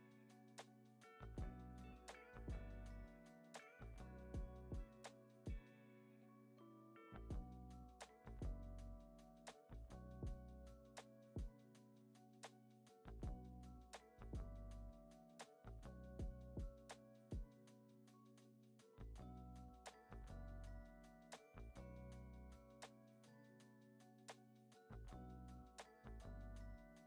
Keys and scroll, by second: 2.7 x, 3.1 z, 10.6 super+c, 10.8 super+v, 11.5 super+s, 12.8 super+c, 13.6 x, 15.2 u, 16.0 super+v, 17.7 u, 18.5 super+v, 19.4 u, 20.1 super+v, 21.6 super+s.